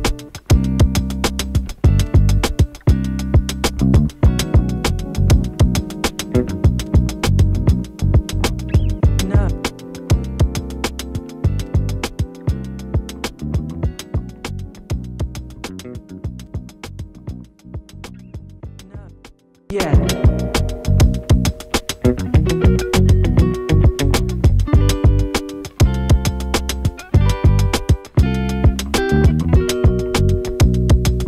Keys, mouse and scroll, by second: 4.0 click, 7.5 t, 8.5-11.6 drag, 13.7 click, 15.2-15.8 alt+scroll up 1, 20.3 click, 20.7 space, 20.9 click, 23.4 shift+click, 25.3 shift+click, 27.7 shift+click.